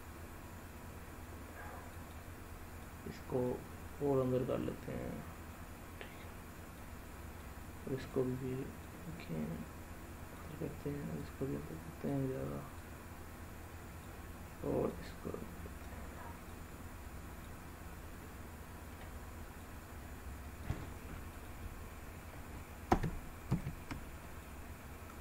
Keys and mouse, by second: 1.9 click, 2.9 click, 4.1-6.7 drag, 7.4 click, 8.7-10.3 drag, 11.1 click, 12.7-13.9 drag, 14.9 click, 16.5 click, 18.1 middle click, 19.5-20.6 drag, 21.2 click, 22.8 ctrl+z, 23.4 ctrl+z, 24.3 click.